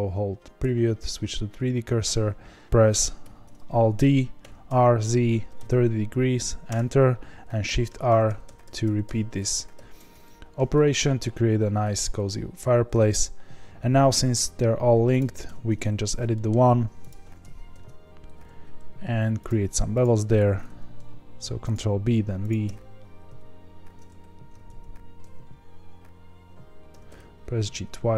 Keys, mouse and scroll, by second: 0.6 ., 1.8-2.6 scroll down 1, 2.6 click, 3.2 alt+d, 7.6-9.7 typing, 15.1 click, 15.4 Tab, 15.9-16.3 scroll up 2, 16.3 shift+middle click, 17.0 click, 17.7 ctrl+b, 20.0 click, 20.3 ctrl+b, 22.4 click, 22.6 v, 24.6 ctrl+z, 26.9 g.